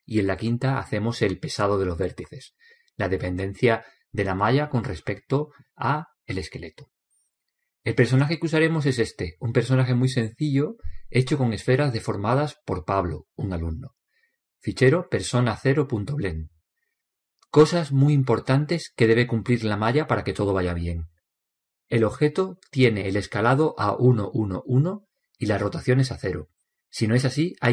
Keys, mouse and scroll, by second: 14.2-16.1 middle drag, 23.6 n.